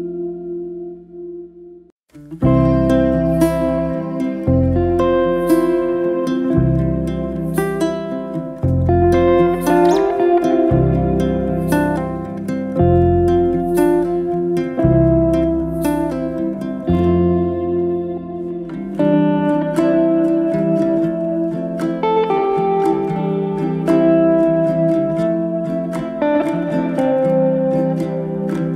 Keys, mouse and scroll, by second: 1.3 click, 2.0-3.5 drag, 4.2-5.2 shift+middle drag, 5.2 click, 6.0-7.5 drag, 8.1-9.7 drag, 10.5 click, 11.2 click, 12.3-13.8 scroll down 2, 13.8 click, 15.3-16.5 drag, 17.1-18.6 drag, 19.8-20.3 drag, 21.6 click, 22.5 click, 23.2-24.7 drag, 26.3 click, 27.2-28.7 drag.